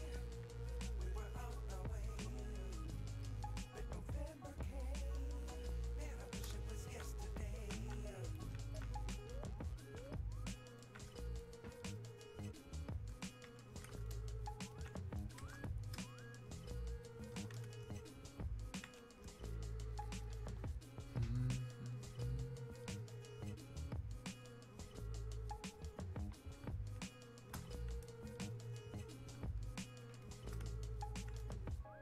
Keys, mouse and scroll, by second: 8.3-10.8 drag, 10.8-15.6 alt+drag, 16.7-21.9 shift+drag, 26.7 click, 28.6-32.0 drag.